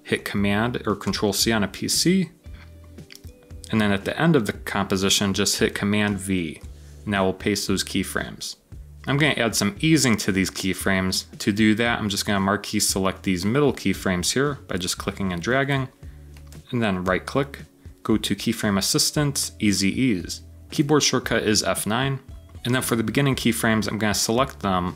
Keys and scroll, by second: 1.0 super+c, 6.0 super+v, 6.5 super+v.